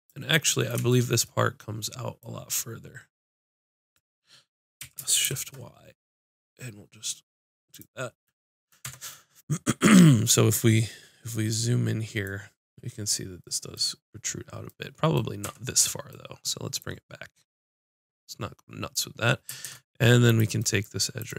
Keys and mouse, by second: 0.1-2.0 drag, 4.8 s, 7.9 click, 8.8 Tab, 15.4 Tab, 16.8-18.9 drag, 18.8 right click, 19.6 ctrl+Tab, 20.7-21.3 drag.